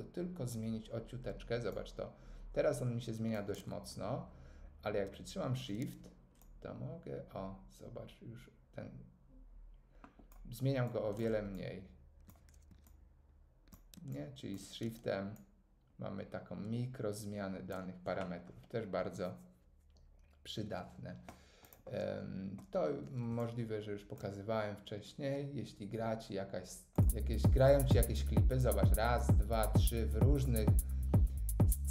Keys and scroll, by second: 3.5 super+z.